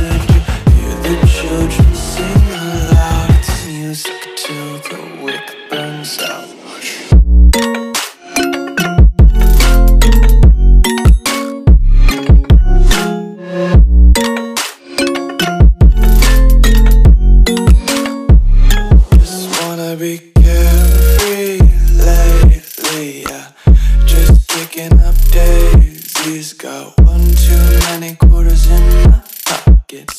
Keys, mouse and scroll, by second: 2.2 click, 13.5 ctrl+c, 14.2 click, 15.2 ctrl+v, 16.1 click, 20.1 F2, 21.4 right click, 22.8 click, 25.1 right click, 26.3 click.